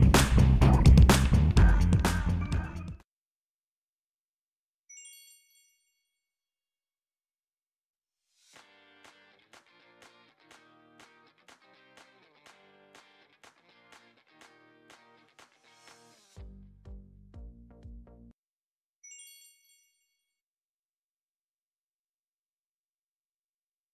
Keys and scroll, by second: 2.0 i.